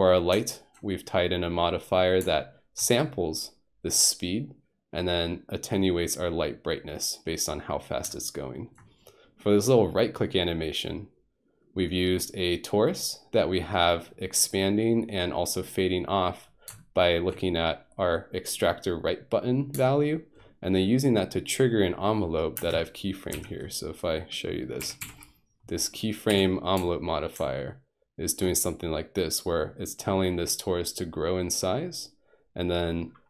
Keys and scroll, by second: 22.6 space, 23.3 Home, 24.8 F3, 25.0 F3, 26.3 a.